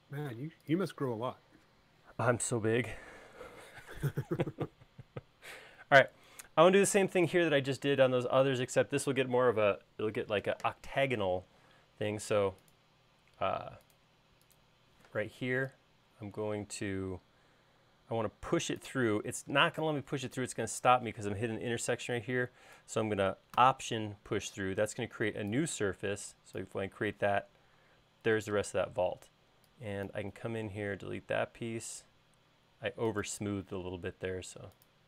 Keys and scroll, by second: 12.6 p, 15.1 p, 26.1 e, 31.8 l.